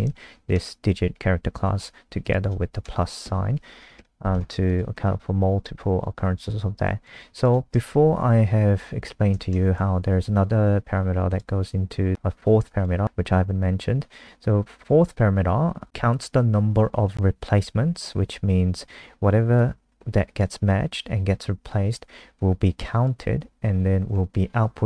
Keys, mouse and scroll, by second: 0.2 shift+Left, 0.3 shift+Left, 0.5 shift+Left, 2.2 click, 2.8 Right, 3.0 Right, 3.2 Left, 4.0 shift+Left, 4.7 click, 4.9 scroll down 2, 6.3 click, 7.2 ctrl+c, 7.4 click, 7.9 Up, 8.0 Up, 8.1 Up, 8.3 Up, 8.5 Up, 8.6 Up, 8.8 Up, 8.9 Up, 9.1 Right, 9.4 ctrl+shift+End, 11.3 click.